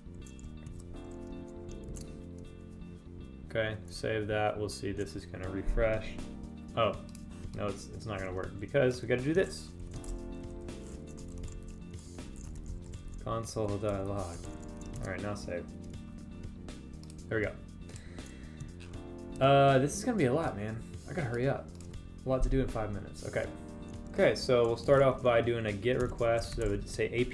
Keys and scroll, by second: 2.4 super+s, 10.9 Left, 15.5 super+s.